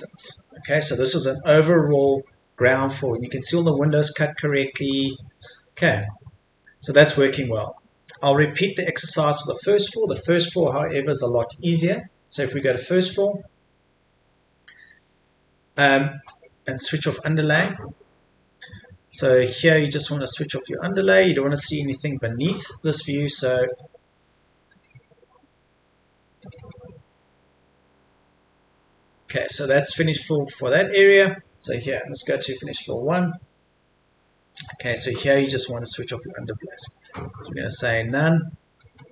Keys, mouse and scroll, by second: 0.6 Escape, 0.7-1.2 scroll down 1, 1.2 middle click, 2.2 scroll up 1, 3.6 middle click, 4.0-4.6 scroll down 1, 4.6 middle click, 5.8-7.3 middle drag, 8.9-9.3 scroll up 1, 9.3-11.7 scroll down 1, 11.7 click, 14.2-14.7 scroll up 1, 20.4-21.0 scroll down 1, 23.5 click, 28.1 scroll down 1, 29.4 middle click, 32.6 click.